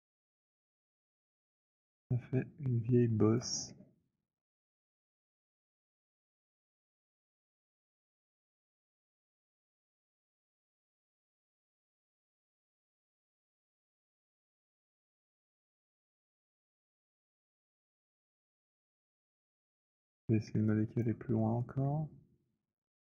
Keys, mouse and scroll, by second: 3.3 alt+click, 6.9 alt+click, 7.3 alt+click, 8.3 alt+middle click, 9.8 click, 11.6-14.2 typing, 13.0 middle click, 14.2 middle click, 15.2 click, 15.7-19.4 typing, 19.4 middle click, 21.0 alt+click, 21.6 alt+middle click, 22.6 click.